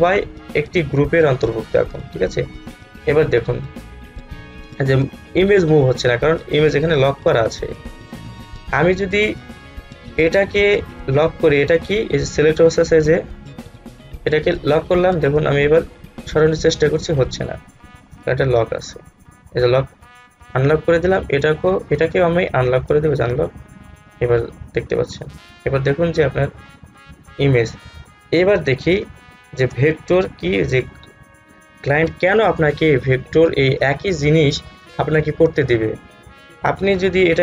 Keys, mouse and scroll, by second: 9.2-14.8 drag, 14.8 click, 22.1-29.2 drag, 29.2 space, 29.3-30.9 drag, 36.5 click, 36.9 alt+scroll up 1.